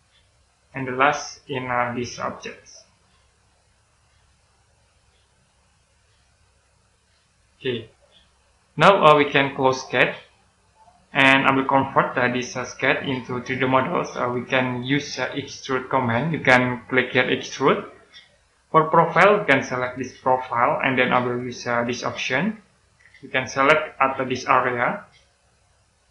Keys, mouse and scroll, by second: 1.0 middle click, 1.5-1.9 scroll up 1, 3.0 click, 7.5-8.5 scroll down 1, 8.5 middle click, 10.4 click, 12.2 middle click, 13.2 right click, 15.4-17.4 scroll up 1, 17.4 click, 20.1 click, 22.7 click.